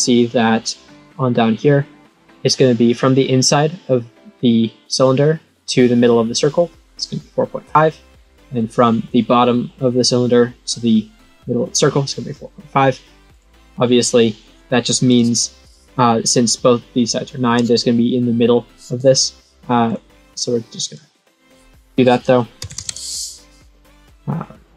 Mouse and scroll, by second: 13.3 click, 15.0 click, 19.8 click, 20.8 click, 21.3 click, 24.4 click.